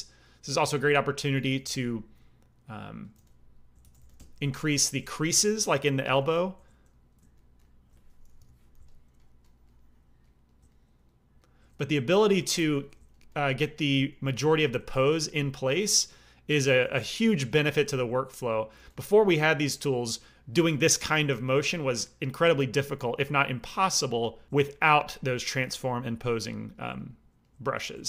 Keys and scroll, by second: 1.5 g, 1.6 f, 3.1 f, 3.8 shift+c, 3.9 f, 4.4 f, 8.3 p, 8.7 f, 12.3 f, 14.2 g, 14.3 f, 14.9 f, 16.8 f, 18.7 f.